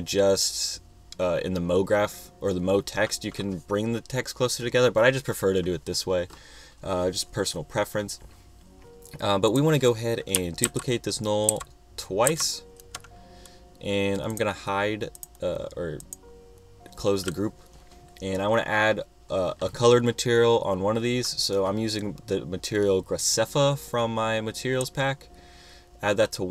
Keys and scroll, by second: 10.9 super+c, 11.7 super+v.